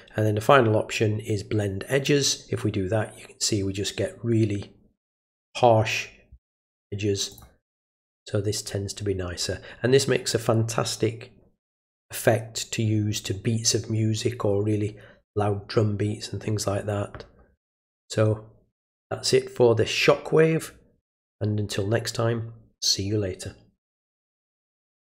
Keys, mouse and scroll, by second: 1.9 click, 7.3 click, 25.0 click.